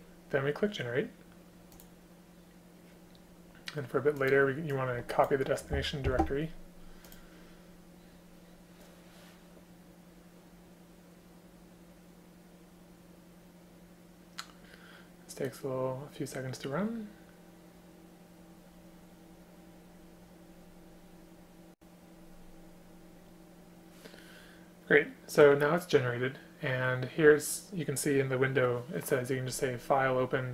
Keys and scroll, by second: 6.1 ctrl+c.